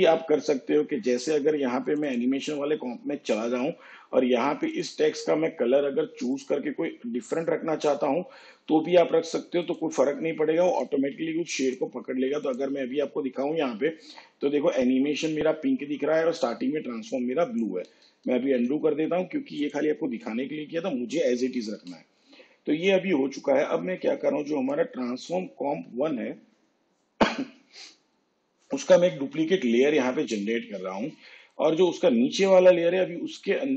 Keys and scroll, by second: 18.1 ctrl+z, 21.8 v, 30.2 ctrl+d.